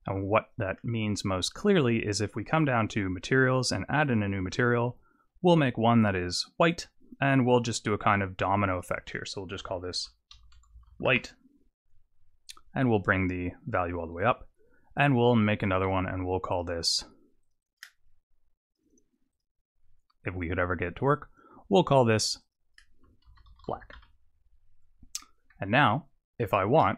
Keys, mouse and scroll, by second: 0.4 click, 2.6 click, 4.0 click, 6.6 click, 8.7 click, 8.9 click, 12.4 click, 14.9 click, 15.6 click, 15.8 click, 16.5 click, 17.4 click, 18.6 click, 19.3 click, 22.4 click, 25.2 middle click, 26.5 shift+middle click.